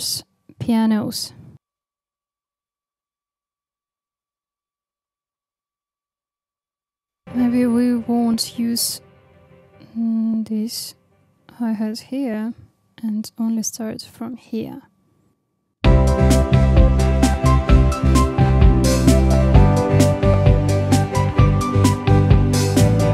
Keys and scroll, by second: 5.6 super+e, 15.7 space.